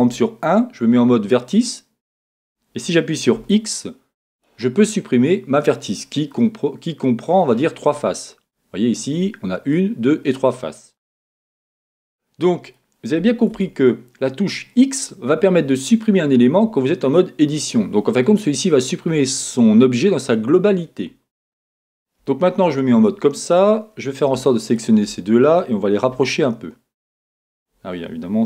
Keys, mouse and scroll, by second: 0.1 1, 1.6 click, 3.4 x, 6.3-24.7 middle drag, 11.4 z, 22.2 KP_1, 24.7 shift+click, 24.8-26.1 middle drag, 26.1 g, 27.6 click.